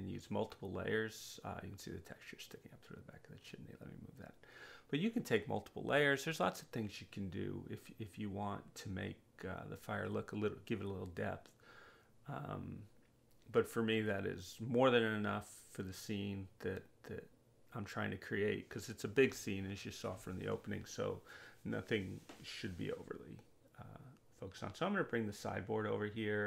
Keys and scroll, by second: 5.7 w, 12.2 space, 14.1 space.